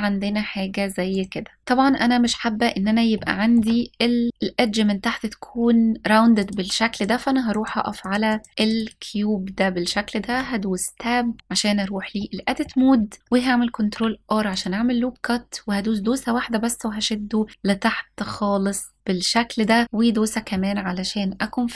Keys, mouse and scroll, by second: 0.9 click, 1.6 middle click, 1.7 scroll up 1, 2.8-3.2 shift+middle drag, 6.0 click, 6.6 click, 7.1 click, 7.6 click, 7.9 click, 8.2 click, 10.0 Tab, 11.4 scroll up 1, 11.8 middle click, 13.3 ctrl+r, 19.2 click.